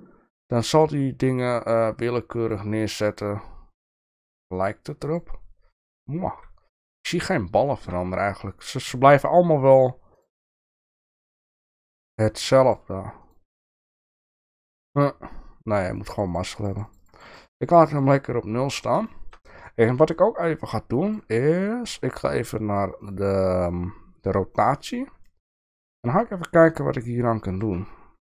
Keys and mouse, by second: 1.3 click, 2.4 click, 3.1 click, 4.5 click, 5.0 click, 7.1 shift+middle click, 7.8 shift+middle click, 10.3 click, 10.9 click, 11.5 click, 12.1 click, 12.6 click, 14.0 click, 15.9 click, 16.1 click, 16.3 click, 16.4 click, 16.6 click, 16.7 click, 16.9 click, 17.1 click, 17.6 click, 17.8 click, 18.1 click, 19.1 shift+middle drag, 23.0 click, 23.6 drag, 25.3 shift+middle click, 26.1-27.8 shift+middle drag.